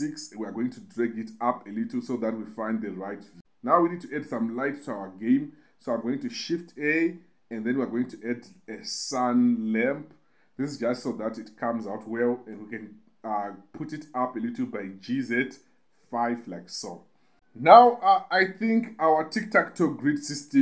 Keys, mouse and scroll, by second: 3.0 KP_0, 6.3 shift+a, 12.5 g, 12.7 z, 16.0 5, 16.7 click, 17.3 KP_7, 18.0 KP_0.